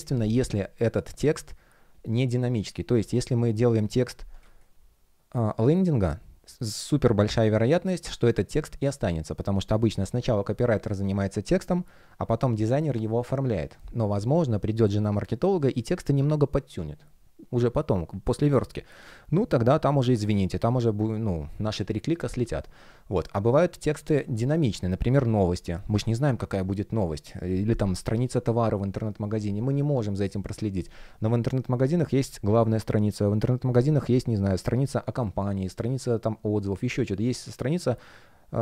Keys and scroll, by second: 4.3 space.